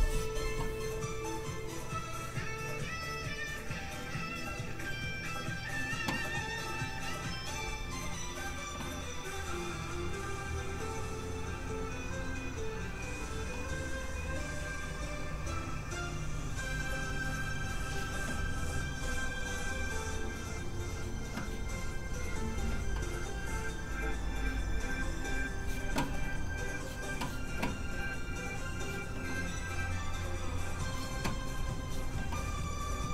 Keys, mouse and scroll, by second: 8.4-9.1 scroll down 1, 9.1 click.